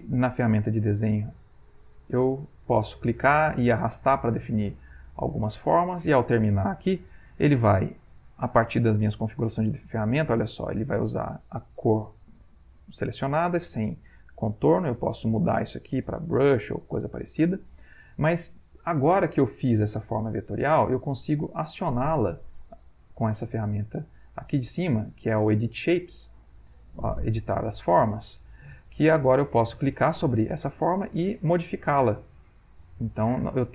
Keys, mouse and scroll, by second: 0.2 click, 1.0-3.1 drag, 3.2-5.3 drag, 14.8 click, 15.3 click, 16.4-17.4 drag, 21.5 click, 22.6 click, 26.5 click, 27.3 click, 28.4 click, 29.7 click, 30.2 click, 31.4 click, 32.5 click.